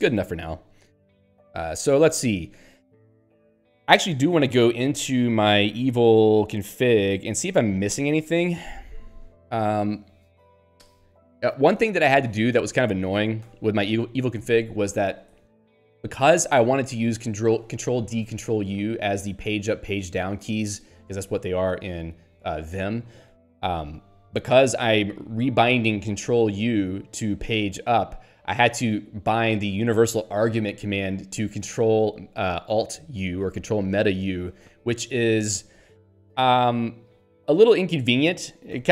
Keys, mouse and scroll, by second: 0.7 Page_Up, 3.4 ctrl+f, 4.8 m, 5.1 o, 5.2 Tab, 5.7 e, 6.3 v, 7.9 ctrl+n, 8.8 Return, 12.1 Down, 28.0 Right, 31.0 Left.